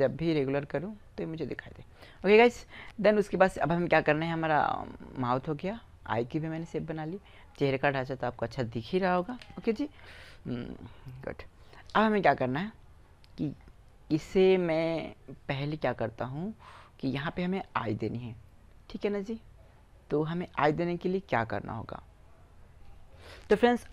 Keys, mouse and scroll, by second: 2.4-4.0 middle drag, 5.1-6.6 middle drag, 9.1 middle click, 9.2 KP_4, 9.2 KP_1.